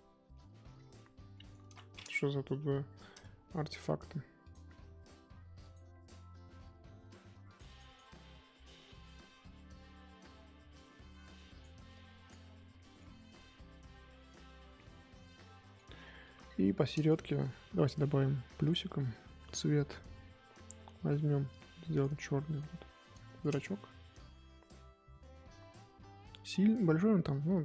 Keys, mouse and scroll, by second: 0.7-1.3 scroll up 3, 1.3 scroll up 2, 1.3 middle click, 1.6 ctrl+z, 2.5 KP_1, 2.8-3.7 scroll up 3, 3.7 f, 5.6-8.3 drag, 8.3-8.6 scroll up 3, 8.6 scroll down 2, 8.8 middle click, 9.3-10.9 scroll down 3, 10.9 f, 11.9 click, 12.4-12.7 scroll down 1, 12.8 middle click, 13.1 scroll down 1, 13.3-15.8 middle drag, 15.8-16.2 scroll up 1, 16.2 KP_1, 16.4-16.9 scroll up 2, 21.5 click, 22.3-23.2 scroll up 2, 23.2 shift+middle click, 23.5-25.4 scroll up 2, 25.4-27.1 scroll down 1.